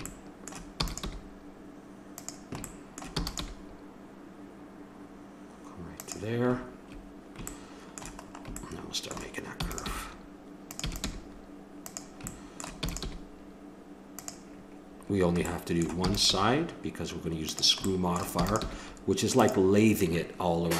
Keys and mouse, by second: 0.8 e, 1.2 g, 2.7 click, 3.2 e, 3.4 g, 9.5 e, 10.0 g, 10.8 e, 11.1 g, 12.4 click, 12.8 e, 13.0 g, 15.5 click, 16.0 e, 16.5 g, 18.3 e, 18.6 g.